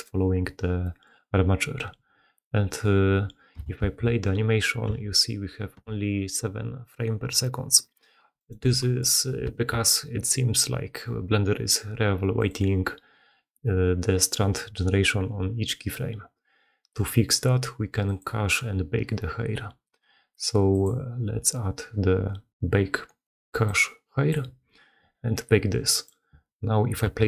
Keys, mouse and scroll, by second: 0.7 click, 0.7 middle click, 0.9 click, 3.8 shift+space, 4.9 g, 8.9-9.3 middle drag, 9.4 shift+space.